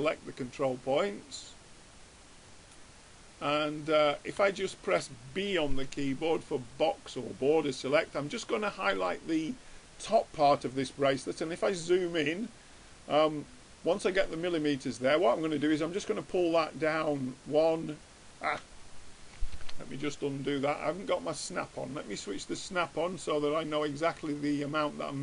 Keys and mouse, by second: 2.6-4.5 drag, 4.2 middle click, 4.2 right click, 4.6-6.4 middle drag, 5.8 b, 10.7-12.5 middle drag, 15.7-17.4 drag, 20.0 ctrl+z, 21.6-23.4 drag, 24.6-25.2 drag.